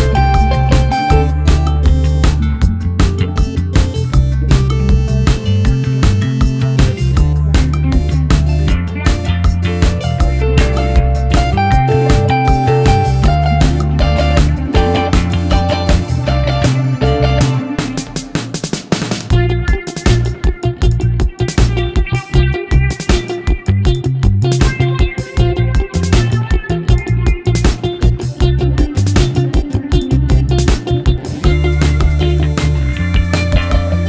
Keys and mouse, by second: 0.6 Tab, 1.7-2.1 shift+middle drag, 3.0 a, 3.8 e, 8.0 Tab, 9.0 ctrl+a, 11.9-13.0 drag, 14.3 click, 19.2 click, 19.8 click, 20.8 click, 26.4 click, 27.9 g, 32.4-32.9 middle drag, 33.2-33.5 shift+middle drag, 33.7 click.